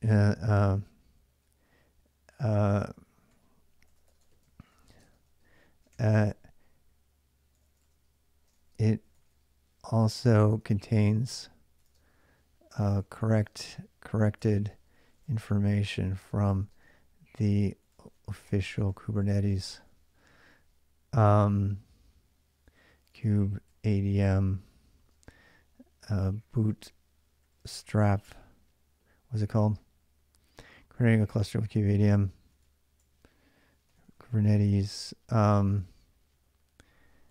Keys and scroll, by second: 0.0-1.7 typing, 3.1-19.7 typing, 3.9 Return, 4.0 Return, 4.2 ctrl+[, 21.4 typing, 22.6-27.9 typing, 29.2-35.1 typing, 35.5 alt+Tab.